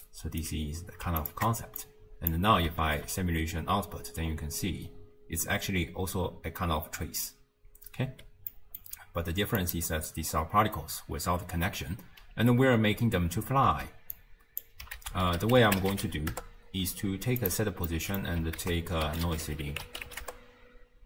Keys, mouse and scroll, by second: 0.0-1.3 alt+right drag, 1.3 ctrl+shift+click, 1.8 click, 2.9 shift+space, 3.6-4.3 scroll down 1, 4.3-5.0 scroll up 2, 5.0-7.9 scroll up 2, 8.3 space, 8.5-9.6 middle drag, 9.6 click, 13.8 x, 14.2 click, 15.0 ctrl+a, 17.9 middle click, 18.6 ctrl+a.